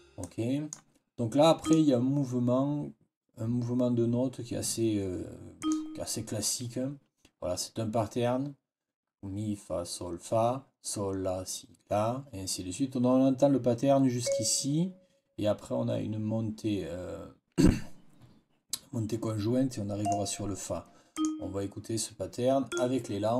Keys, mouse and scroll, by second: 0.1 click, 1.5 click, 5.5 click, 14.1 click, 19.9 click, 21.0 click, 22.6 click.